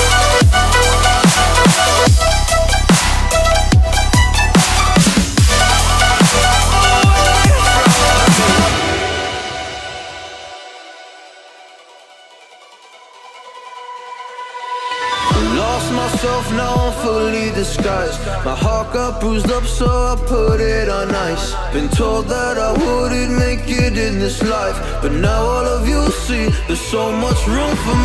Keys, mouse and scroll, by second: 0.2 space, 1.1 right click, 2.5-4.7 drag, 20.2 click, 20.4-21.0 click, 22.1 Return, 23.4-26.7 typing, 23.5 click, 23.5-24.1 click, 24.2-25.2 click, 25.5-26.7 click, 27.5 drag.